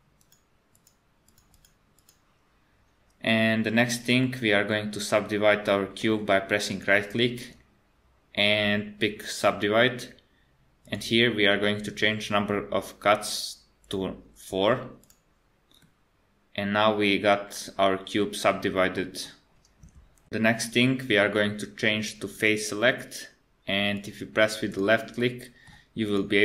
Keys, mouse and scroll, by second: 0.2 click, 1.3 click, 1.6 click, 4.2 middle click, 6.7 right click, 10.9 click, 13.8 click, 15.8 middle click, 19.1-19.9 scroll up 1, 22.3 click, 24.0 click, 24.7 click, 25.2 middle click, 26.1 click.